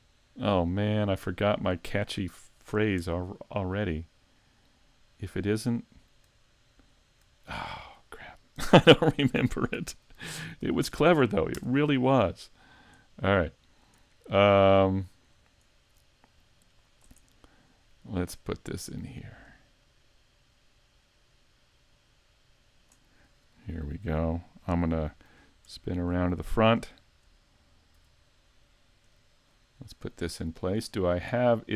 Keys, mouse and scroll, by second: 0.4 middle click, 0.4-0.7 scroll down 1, 2.1 right click, 3.0 Tab, 3.3 middle click, 6.4 shift+middle click, 6.9-9.3 scroll up 2, 7.4 shift+middle click, 9.3 r, 12.3-12.9 scroll down 7, 13.1 middle click, 14.0 shift+middle click, 14.6-14.9 scroll down 1, 14.9 shift+middle click, 16.3 click, 17.2 middle click, 18.6 click, 25.7 ctrl+KP_3, 26.8 KP_5, 27.9 z, 29.0 KP_5, 29.5-29.9 scroll up 3, 29.9 shift+middle click, 30.5-30.9 scroll up 2, 30.9 shift+middle click.